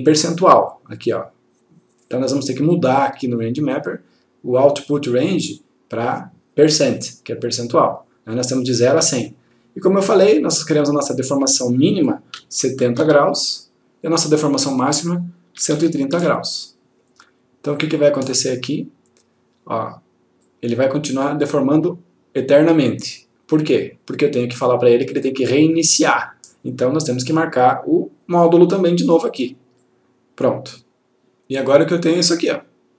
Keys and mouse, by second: 7.5 click, 13.6 click, 15.7 typing, 16.8 click, 25.2 click, 29.9 click, 30.9 click.